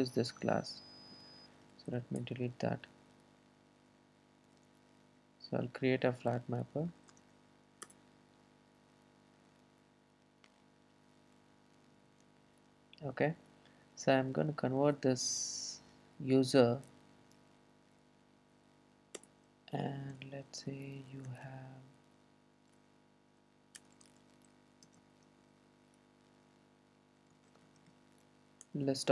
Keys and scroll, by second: 2.2 Delete, 4.6 super+c, 8.5 super+v, 11.7 ctrl+shift+super+F12, 21.3 Return, 28.9 Return.